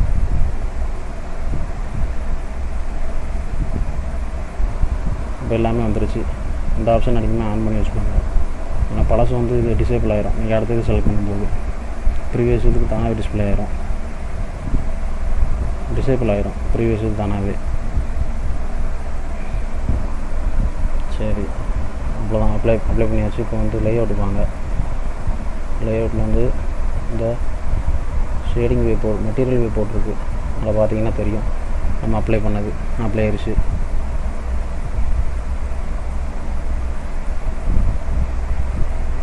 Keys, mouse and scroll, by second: 26.4 click, 30.4 middle click, 30.9-31.4 scroll up 2, 31.4 middle click, 31.8-32.3 scroll up 1, 32.3 middle click, 32.3-33.2 scroll up 1, 33.2 scroll down 1, 33.7 middle click, 34.5-34.9 scroll down 2, 34.9 middle click, 35.7 middle click, 36.4-36.7 scroll up 1, 37.1 middle click, 37.6 click, 38.4 middle click.